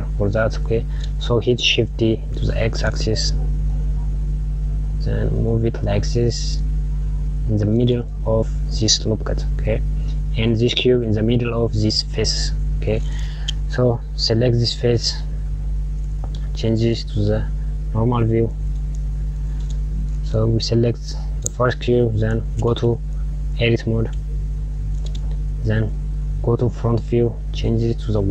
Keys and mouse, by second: 2.0 shift+d, 14.4 click, 15.8 click, 17.6 click, 18.4 click, 19.8 KP_Subtract, 20.0 KP_Subtract, 23.4-25.9 drag, 26.7 KP_1.